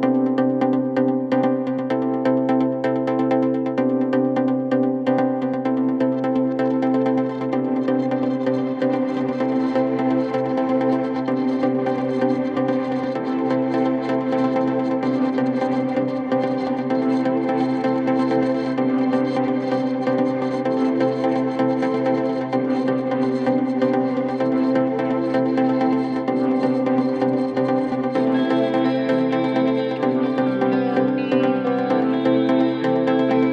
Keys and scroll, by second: 7.2 ], 8.4 4, 8.9 ctrl+F1, 12.2 2, 27.2 ctrl+z, 30.8 ].